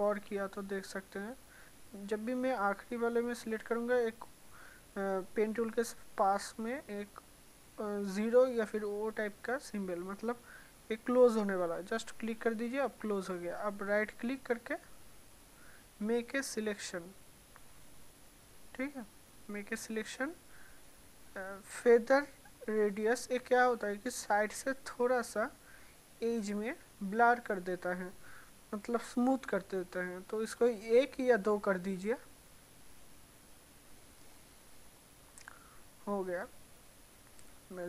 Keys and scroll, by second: 0.0 ctrl+alt+z.